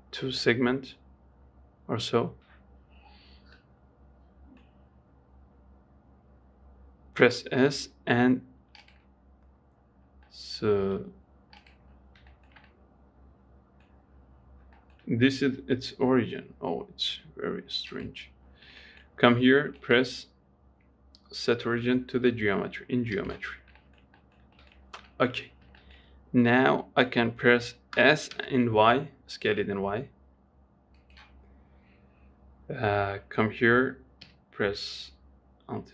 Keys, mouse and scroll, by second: 3.9-4.9 middle drag, 4.9-7.5 scroll down 2, 7.5 s, 10.1-10.6 scroll down 4, 10.6 middle click, 11.1 s, 12.2-12.6 scroll down 4, 12.6-14.3 shift+middle drag, 14.3-14.7 scroll up 3, 14.7-15.1 scroll down 3, 15.1-17.4 shift+middle drag, 17.4 g, 18.8-19.1 scroll up 4, 19.1 shift+middle click, 19.4-20.1 scroll up 1, 20.1-23.2 right drag, 23.8-24.1 scroll up 3, 24.1-25.2 shift+middle drag, 25.2-25.8 scroll up 2, 25.8-26.1 scroll down 3, 26.1-28.3 shift+middle drag, 28.3 s, 33.2 g.